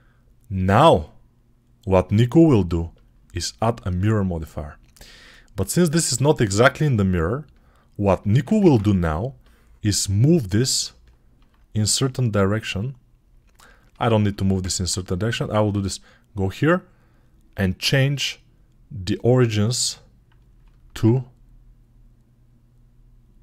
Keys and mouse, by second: 5.1-7.1 ctrl+alt+drag, 8.5 ctrl+Tab, 11.4-13.9 drag, 14.8 click, 15.5-17.4 middle drag, 17.4 click, 17.5-18.9 middle drag, 18.9-23.4 drag.